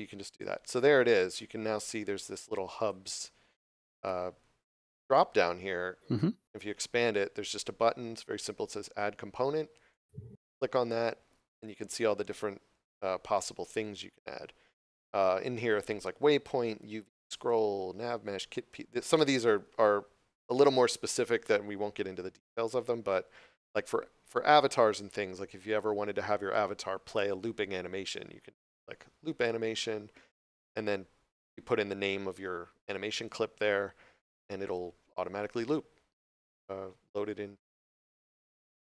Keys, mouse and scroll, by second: 0.2 scroll down 1, 2.1 click, 9.8 click, 29.3 click.